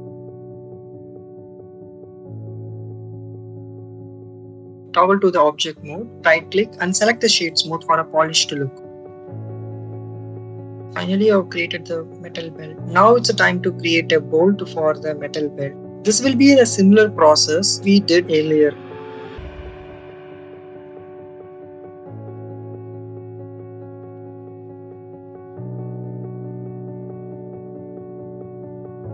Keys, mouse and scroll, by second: 0.7 right click, 1.3 middle click, 1.7 middle click, 2.4 ctrl+r, 4.8 click, 5.8 Tab, 7.9 shift+middle click, 9.8 middle click, 11.2 click, 12.7 click, 16.9 shift+a, 21.3 y, 21.4 9, 21.5 0, 21.9 click, 22.9 click, 23.6 Tab, 24.9 /, 26.0 click, 26.6 click, 27.5 click, 28.7 Delete.